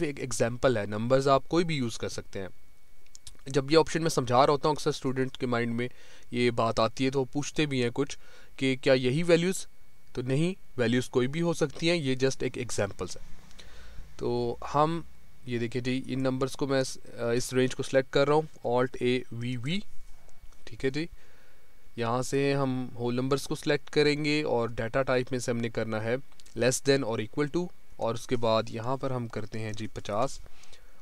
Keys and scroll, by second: 18.9 alt+a, 19.3 alt+v.